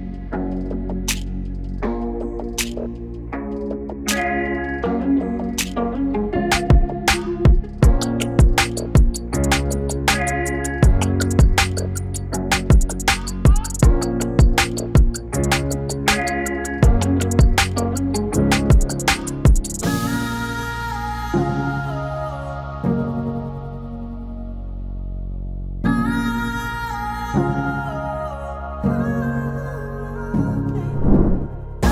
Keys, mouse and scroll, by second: 3.2 right click, 4.6 click, 7.5-11.4 drag, 13.5 click, 15.0 typing, 16.7 click, 22.8-28.4 drag, 31.5 click, 31.8 ctrl+shift+d.